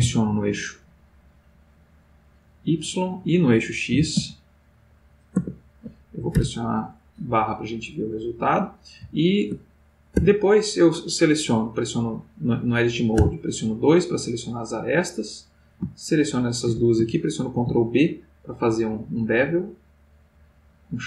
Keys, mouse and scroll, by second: 0.0-0.5 typing, 2.4 click, 2.9 middle click, 4.0 s, 4.2 x, 5.3 click, 7.3-10.4 middle drag, 10.4 ctrl+Tab, 13.1 2, 15.4 click, 16.0 shift+click, 17.5 ctrl+b.